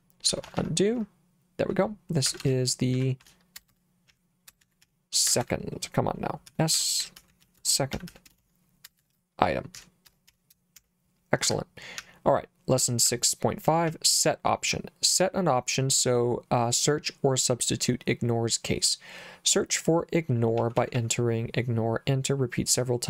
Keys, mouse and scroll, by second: 0.3 u, 0.5 u, 0.6 u, 1.0 u, 2.3-10.8 typing, 11.5 Escape, 12.0 j, 13.1 j, 13.9 j, 20.6 j, 20.8 j, 21.0 j.